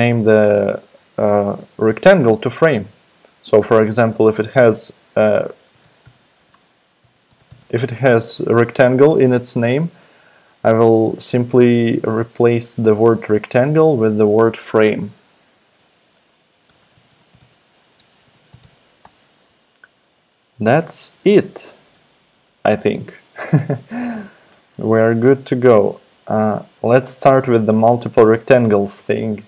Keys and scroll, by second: 0.0-0.3 typing, 5.4-8.1 typing, 16.4-19.1 typing.